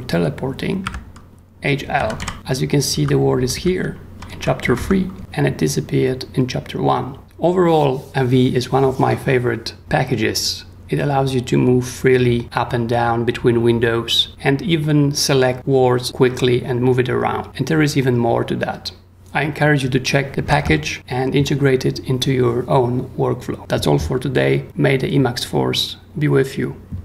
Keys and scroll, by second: 0.8-4.8 typing, 5.1 Escape, 20.5 super+Tab.